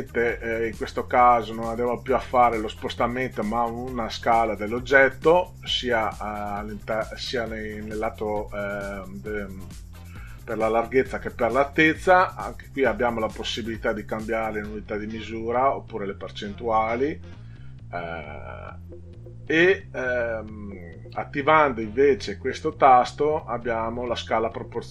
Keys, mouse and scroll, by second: 5.1 click, 12.2 click, 22.7 click.